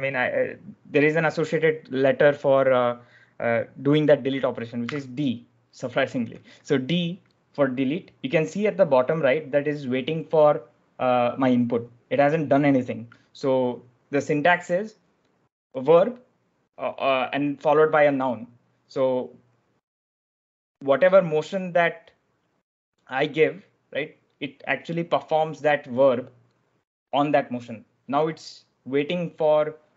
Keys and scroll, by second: 4.7 d.